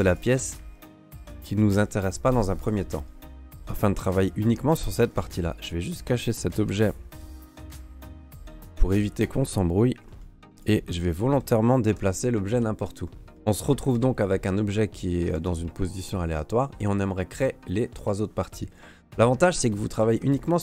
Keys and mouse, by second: 0.6 click, 1.7 Delete, 2.6 middle click, 3.4 ", 5.1 Tab, 5.6 click, 6.7 h, 8.9 right click, 10.0 g, 11.0 alt+middle drag, 11.9 g, 13.0 middle drag, 13.2 click, 13.4 g, 13.5 drag, 13.9 ctrl+s, 14.5 Tab, 15.3 ctrl+Tab, 18.4 middle click, 20.3 alt+middle click.